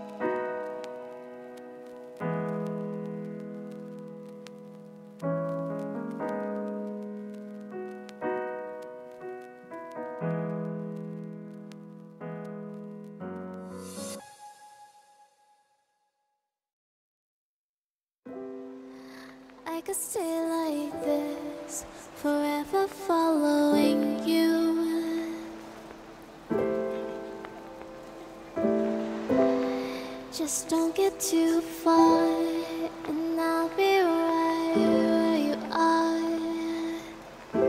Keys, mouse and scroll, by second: 4.8 right click, 7.8 shift+right click, 9.3-10.6 right drag, 9.9 f, 11.1 ctrl+z, 11.1 ctrl+z, 11.2-11.9 ctrl+z, 11.2 right click, 12.0 ctrl+z, 12.1 ctrl+z, 12.8 ctrl+z, 15.6 Tab, 16.8 ctrl+p, 18.7 Tab, 18.9 Tab, 19.6-21.1 drag, 22.2-22.7 right drag, 22.7 ctrl+p, 24.5-25.7 middle drag, 25.7-27.9 drag, 27.9 KP_Decimal, 28.5-29.2 drag, 31.2 n, 32.2-35.1 drag, 35.1-35.6 middle drag, 35.6-37.5 right drag, 36.4-37.6 middle drag, 37.5 ctrl+p.